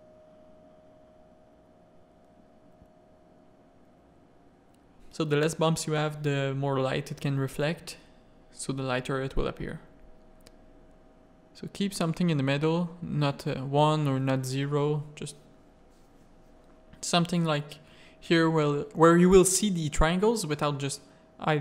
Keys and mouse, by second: 0.1 click, 0.7 click, 1.5-10.8 drag, 12.7 middle click, 12.9 click, 13.0 middle click, 14.4 middle click, 15.4-15.9 drag, 18.7 click, 18.8 middle click, 19.5 middle click, 21.0 click.